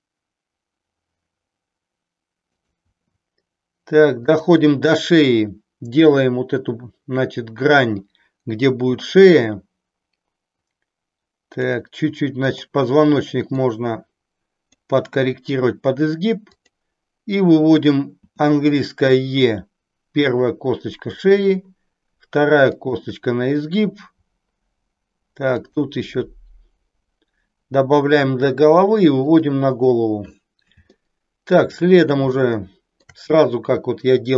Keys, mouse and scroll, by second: 2.6 click, 3.0 e, 4.3 click, 9.0-11.7 drag, 12.3 click, 13.6-14.8 drag, 16.4 click, 18.2 e, 21.2 click, 21.3 e, 22.9 e, 25.6 click, 28.2 e, 29.3 click, 31.1 shift+middle click, 32.4 shift+middle click.